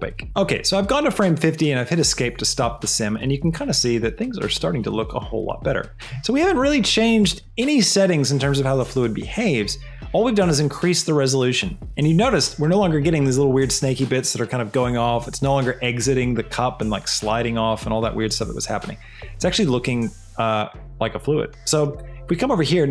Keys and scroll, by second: 0.2 Escape.